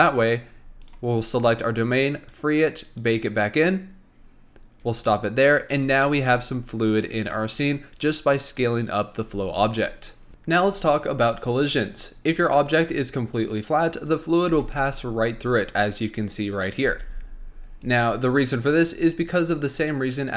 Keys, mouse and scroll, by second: 0.4-1.0 scroll down 2, 1.0 click, 2.3-5.8 drag, 5.8-6.2 scroll down 1, 6.2-8.1 shift+middle drag, 8.1 click, 14.6 space, 16.9 space, 17.9 click.